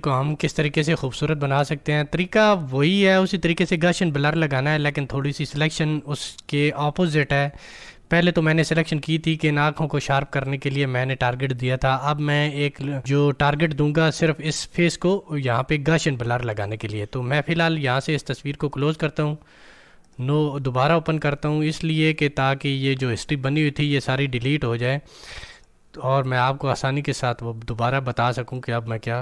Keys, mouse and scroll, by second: 18.6 click.